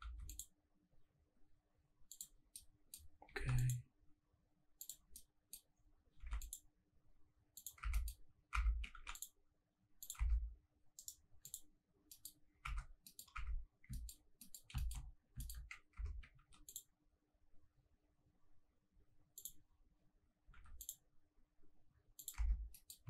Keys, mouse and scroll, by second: 0.0 ctrl+r, 2.1 click, 2.5 middle click, 3.5 ctrl+r, 4.8 click, 5.1 middle click, 5.7-6.1 scroll down 1, 6.3 ctrl+r, 7.6 click, 7.8 Tab, 7.9 middle click, 8.2 scroll up 2, 8.5 Tab, 9.0 ctrl+r, 10.0 click, 10.3 Tab, 10.3 scroll down 1, 10.7 scroll up 1, 11.0 right click, 12.1 middle click, 12.4 scroll up 1, 12.6 Tab, 12.9 scroll down 1, 13.1 middle click, 13.3 Tab, 13.7-14.0 scroll down 2, 13.9 shift+middle drag, 14.4 middle click, 14.8 shift+middle drag, 15.0-15.7 scroll up 3, 15.4 shift+middle click, 15.9 Tab, 16.4 ctrl+r, 19.3 click, 20.5 ctrl+r, 22.2 click, 22.4 Tab, 22.6 scroll down 2, 22.7 middle click.